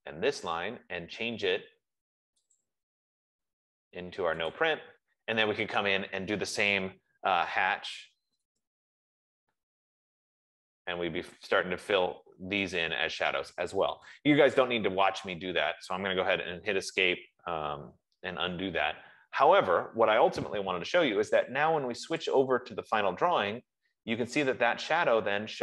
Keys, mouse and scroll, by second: 0.4 click, 2.8 click, 4.9 click, 5.7 Escape, 7.6-9.9 typing, 8.7-9.8 drag, 10.9 F15, 12.5-14.6 typing, 13.1 click, 14.3 click, 16.5 Escape, 18.4 ctrl+z, 19.7 Escape, 20.2 Escape, 22.9 click, 25.4 scroll.